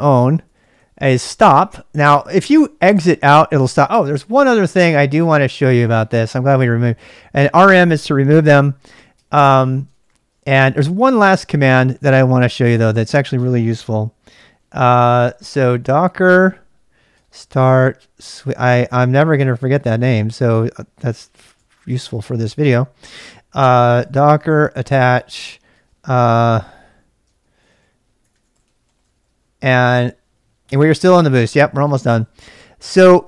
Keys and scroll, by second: 0.0-1.3 typing, 5.7-13.2 typing, 14.3-29.0 typing, 30.4-31.1 typing, 32.8 typing.